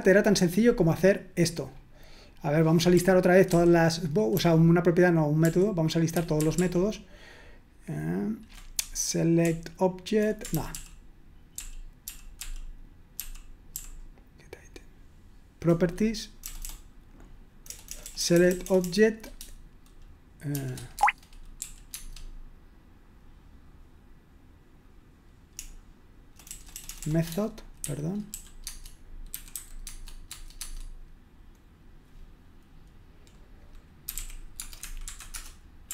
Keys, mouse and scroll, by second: 1.7-2.4 scroll up 1, 2.4-3.4 scroll down 2, 3.5 ctrl+p, 4.4 ctrl+p, 5.4 ctrl+p, 6.1 ctrl+p, 9.4 BackSpace, 10.1 BackSpace, 10.5 ctrl+p, 10.7 ctrl+p, 11.6 ctrl+p, 12.1 ctrl+p, 16.7 BackSpace, 17.9 BackSpace, 21.0-21.9 BackSpace, 25.5-29.8 typing, 28.7 Tab, 30.3 Tab, 30.6 Tab, 33.9-34.7 typing, 35.3 Return.